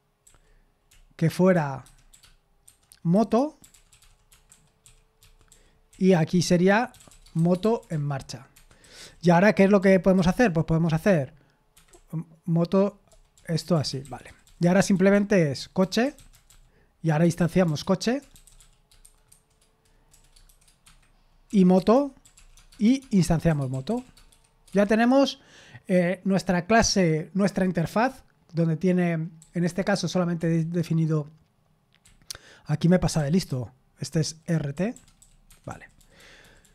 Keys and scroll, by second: 6.8-8.5 typing, 9.6-10.4 typing, 17.5-20.5 typing, 23.6-25.2 typing, 29.6 typing.